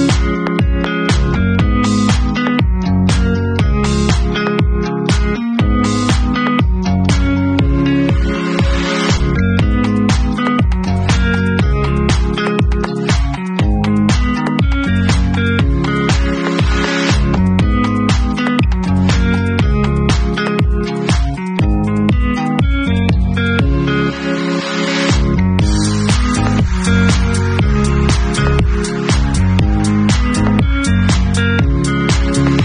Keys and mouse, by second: 2.2 ctrl+s, 7.7 middle click, 7.7 right click, 10.8-11.4 middle drag, 11.4-12.3 drag, 11.5 middle click, 12.3 middle click, 12.5-13.3 alt+drag, 13.3-13.9 alt+middle drag, 13.9-17.7 alt+drag, 15.9 Tab, 17.8-26.9 drag, 27.0 ctrl+z, 31.1-32.6 drag.